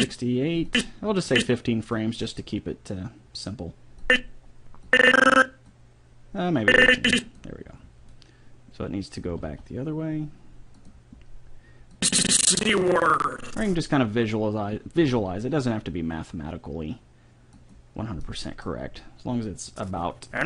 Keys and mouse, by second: 2.2 click, 4.1-5.5 drag, 5.7 click, 6.0 click, 6.9-8.5 drag, 9.3 r, 12.0-13.7 drag, 15.0 r, 19.9-20.4 drag.